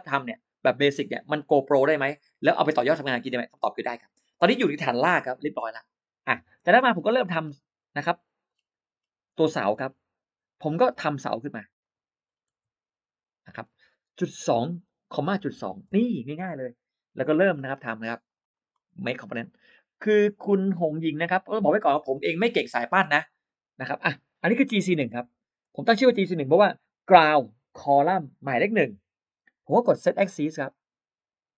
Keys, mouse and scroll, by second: 6.7-7.0 scroll down 1, 7.0 space, 7.1 middle click, 7.3-7.6 scroll down 1, 7.6-8.2 scroll up 2, 8.3-8.6 scroll down 1, 8.8 scroll up 1, 9.3-9.9 scroll up 4, 10.8 r, 11.6 click, 12.1-12.4 scroll down 3, 14.4-15.4 typing, 16.3 Return, 17.3 space, 17.5 middle click, 17.9 click, 18.1 click, 18.2 click, 18.4 click, 18.6 right click, 19.6 click, 24.7 g, 25.6 c, 30.5 click.